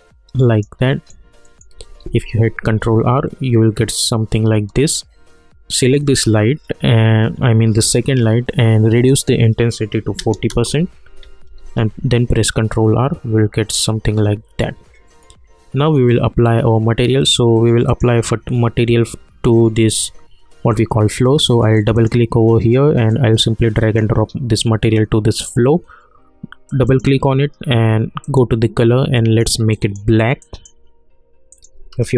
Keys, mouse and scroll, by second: 0.9 middle click, 2.0 ctrl+r, 5.8 click, 8.9 click, 10.5 Return, 11.6 ctrl+r, 17.8 click, 21.7-26.2 drag, 26.7 click.